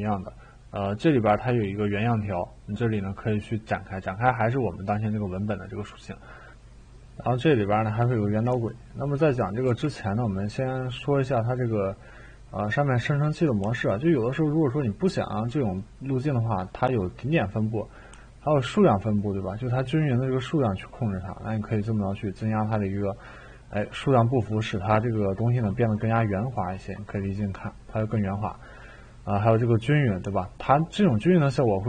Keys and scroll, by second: 9.6 e.